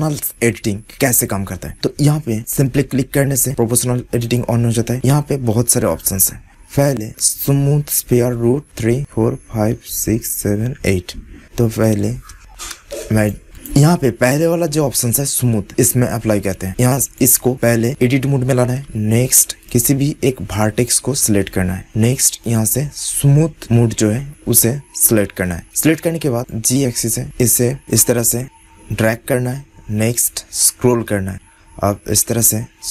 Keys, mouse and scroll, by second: 1.7-3.4 drag, 4.1-6.5 drag, 7.0-8.6 drag, 11.6-13.0 drag, 12.6 shift+d, 13.4-15.7 drag, 17.0-18.8 drag, 18.8 Tab, 19.6 click, 20.5-21.5 middle drag, 21.5 click, 21.6-23.7 middle drag, 23.7 click, 26.4 click, 27.0 middle click.